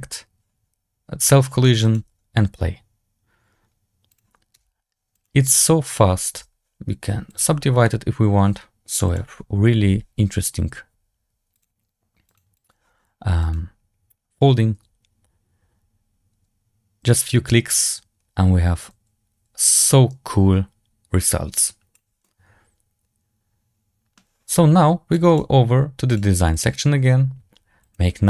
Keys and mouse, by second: 4.0 click, 4.4 w, 5.7 click, 6.3 Tab, 7.2 click, 7.8 middle click, 11.4 click, 12.2 click, 12.4 click, 21.5 click, 22.1-24.0 middle drag, 25.0 click, 26.0 click, 27.8-28.2 drag.